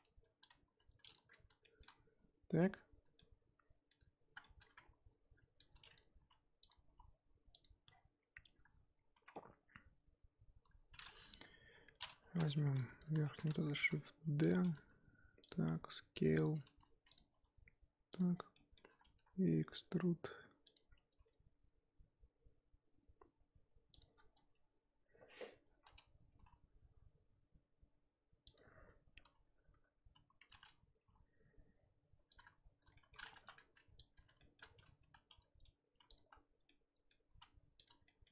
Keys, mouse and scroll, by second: 0.6 s, 1.3-1.6 scroll down 1, 1.6-4.6 shift+middle drag, 4.6-5.6 scroll up 1, 5.6-6.2 drag, 6.2 g, 6.9 s, 7.9-8.7 scroll down 4, 8.7-9.1 scroll up 1, 9.1 z, 9.3-11.3 middle drag, 11.3 KP_1, 12.2 z, 12.6 3, 12.7-13.2 drag, 13.2 shift+middle drag, 13.4-13.7 scroll up 2, 13.7 shift+d, 14.6 r, 15.6 s, 16.6 g, 17.3 s, 18.3 scroll down 1, 18.5-19.1 shift+middle drag, 19.1 e, 20.8-21.2 scroll up 4, 21.2 g, 24.1 scroll down 4, 25.6-26.3 scroll up 1, 26.3 g, 30.0 l, 31.0 g, 32.9 shift+middle drag, 33.2 scroll up 2, 33.3 1, 33.9-34.4 ctrl+drag, 34.4-35.0 shift+middle drag, 35.0 g, 36.1 z, 36.6-37.3 middle drag, 37.3 s, 38.0 shift+middle click.